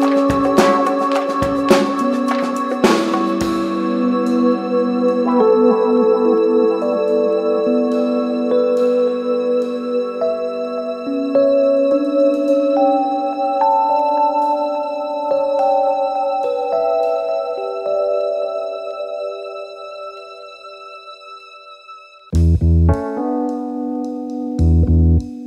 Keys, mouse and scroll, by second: 8.2 right click, 10.0 click, 15.6-19.4 drag, 19.9 ctrl+s, 20.9 space, 22.1 click.